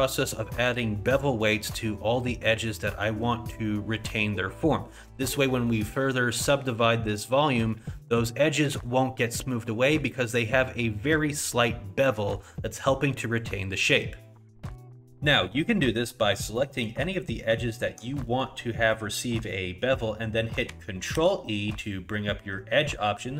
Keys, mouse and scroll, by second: 1.7 middle click, 2.5 middle click, 6.6 middle click, 7.7 middle click, 9.0 scroll down 1, 9.3 middle click, 14.9 click, 14.9 middle click, 14.9-16.2 scroll down 3, 16.2 scroll up 2, 16.5 middle click, 17.7 alt+click, 18.2 middle click, 19.2 middle click, 21.2 ctrl+e.